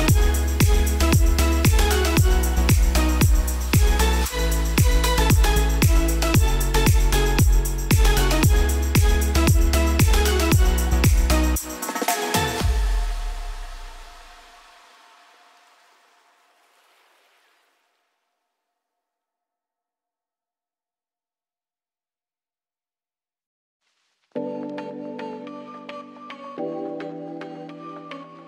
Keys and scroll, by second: 7.6 n, 27.2 s.